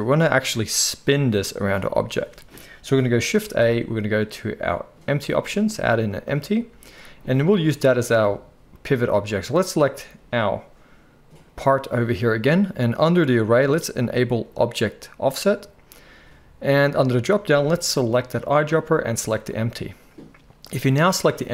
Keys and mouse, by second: 3.3 shift+a, 9.7-14.5 middle drag, 14.5 click, 14.6 middle click, 15.4-17.4 drag, 17.4-20.9 middle drag, 20.9 click, 21.0-21.5 middle drag.